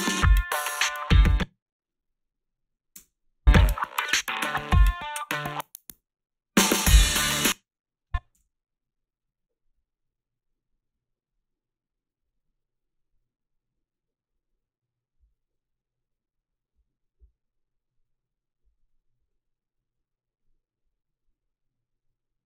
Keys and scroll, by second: 1.1 space, 3.0 space, 7.2-8.8 typing.